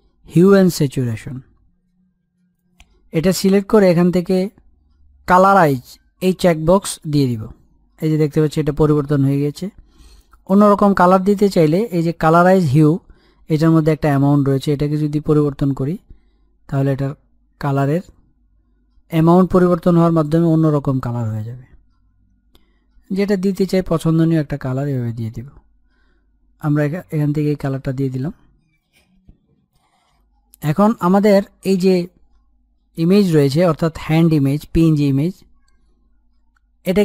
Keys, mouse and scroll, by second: 2.4 click, 6.4 click, 14.6-24.6 drag, 28.1-28.6 scroll down 1, 28.7 click, 28.9 scroll up 1, 31.1-31.5 scroll up 1, 31.9 click, 33.5 e, 36.3-37.0 scroll down 1.